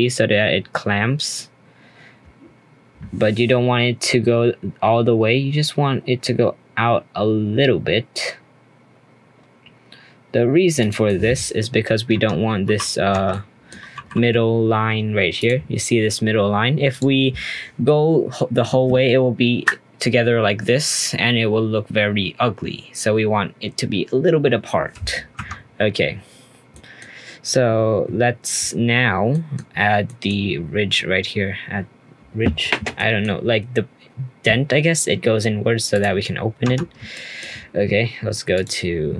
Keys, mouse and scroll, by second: 11.0 middle click, 11.7-12.1 scroll up 1, 12.1 Tab, 12.3 scroll up 2, 12.6 2, 13.1 Tab, 13.3 middle click, 13.9 2, 15.4-17.0 drag, 17.2-17.8 scroll down 2, 17.8-21.0 middle drag, 25.3 Tab, 26.1-26.7 scroll up 1, 26.7-27.0 middle drag, 27.0 scroll down 1, 29.3 middle click, 29.7-30.0 scroll up 1, 30.0-30.6 middle drag, 30.6-31.1 scroll down 1, 31.1-32.9 scroll down 1, 32.9-35.9 middle drag, 35.9 click, 36.2-36.6 scroll up 1, 36.6 Tab, 37.1 shift+middle click, 38.5-39.1 drag.